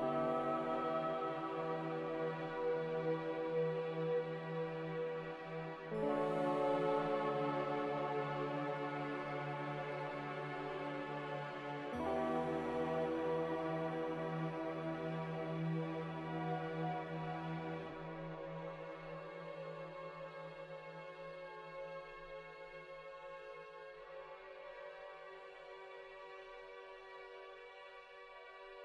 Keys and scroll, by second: 3.3-4.7 typing, 8.6-9.9 typing, 11.0 c, 17.0 ctrl+z, 17.5 ctrl+z, 17.8 ctrl+z, 18.0 ctrl+z, 18.2 ctrl+z, 24.3 z, 25.4 a, 27.9 ctrl+z.